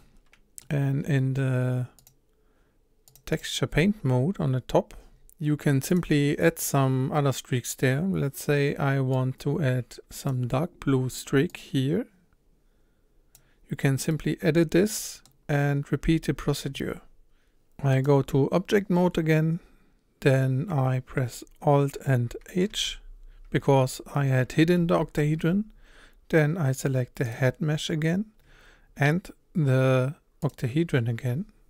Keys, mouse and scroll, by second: 0.0-0.7 middle drag, 0.7-1.8 scroll up 4, 3.6-5.1 drag, 5.1-5.7 scroll up 2, 8.0 click, 9.1-14.1 drag, 14.1-15.3 middle drag, 15.3-17.0 scroll down 2, 17.0 scroll down 1, 17.6 h, 21.1 scroll down 1, 21.4-22.0 scroll up 1, 22.7 alt+h, 27.3 click, 30.5 shift+click.